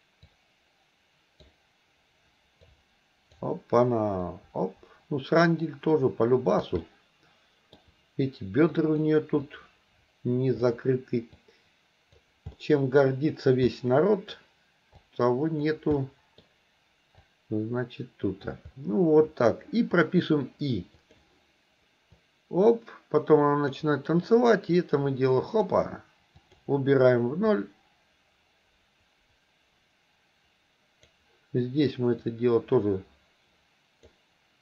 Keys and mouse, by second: 0.3-1.5 drag, 2.7 click, 4.3-6.7 drag, 6.8 middle click, 8.9 click, 9.5-10.7 drag, 11.4 click, 12.6 middle click, 13.7 middle click, 15.0 click, 16.0 middle click, 17.3-18.5 drag, 21.1 click, 22.3-23.8 drag, 24.8 click, 26.5 click, 27.6-31.2 drag, 32.2-34.2 drag.